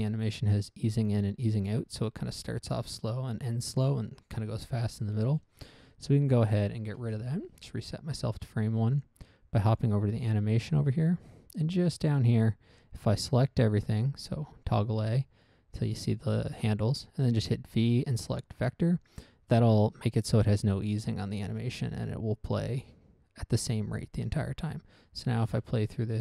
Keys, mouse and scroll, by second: 5.4 Escape, 6.7 click, 7.3 1, 7.5 Return, 9.2 click, 10.1 click, 11.1 scroll up 1, 12.6 middle click, 13.1 middle click, 13.8 a, 14.1 a, 14.5 a, 15.1 a, 17.7 v, 18.6 click, 22.9 click, 24.5 click, 25.2 click, 25.8 alt+a.